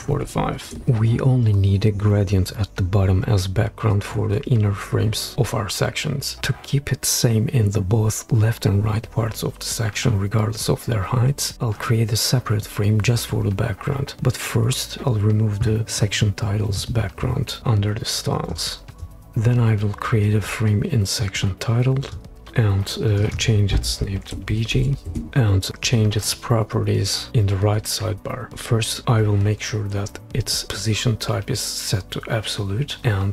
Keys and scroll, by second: 0.0-0.6 typing, 19.3 f, 24.5 shift+b, 24.7 shift+g, 25.0 Return.